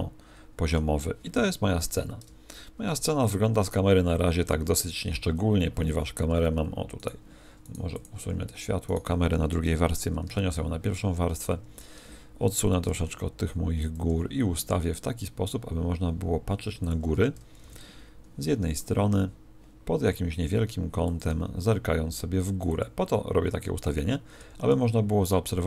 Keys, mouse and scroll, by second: 1.8 KP_0, 6.3 2, 6.9 right click, 8.0 x, 11.6 1, 12.8 g, 13.9 click, 14.0 g.